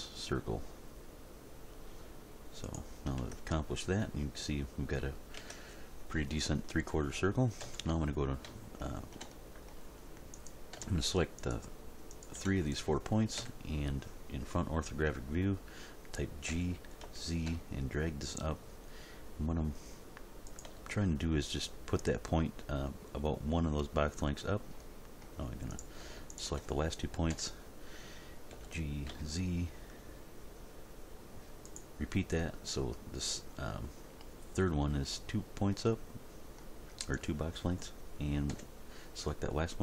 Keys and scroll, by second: 3.2 Tab, 5.4 Tab, 7.6 End, 13.4 End, 16.5 g, 17.0 z, 27.3 End, 28.5 g, 29.1 z, 38.5 End.